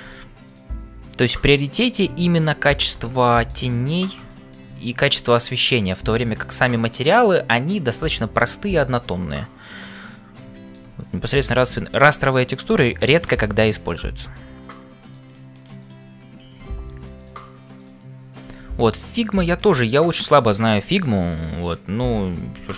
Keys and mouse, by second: 0.0-22.7 typing, 3.3 middle click, 4.3 middle click, 10.5 shift+middle click, 11.4 click, 12.8 click, 17.7 click, 20.1 shift+middle click, 21.4 click.